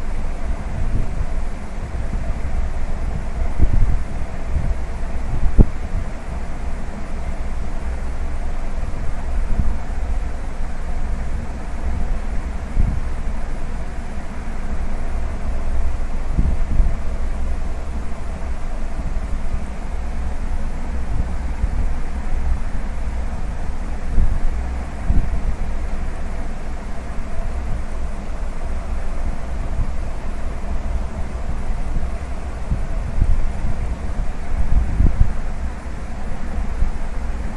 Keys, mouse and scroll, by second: 2.5 ctrl+z, 2.9 e, 7.7 middle click, 8.6-9.1 scroll up 2, 9.1 middle click, 11.2 click, 12.4 click, 13.3 shift+click, 14.0 shift+click, 14.6-15.4 scroll down 2, 15.1 middle click, 16.5 e, 19.3 middle click, 20.4 click, 22.2 click, 23.1 shift+click, 24.0 shift+click, 24.5-24.9 scroll down 2, 24.9 middle click, 27.6 middle click, 29.0 e, 31.9 middle click, 32.4-32.9 scroll up 2, 32.9 middle click, 33.6 shift+middle click, 34.2 middle click, 34.7 scroll up 1, 36.4 click, 37.4 shift+click.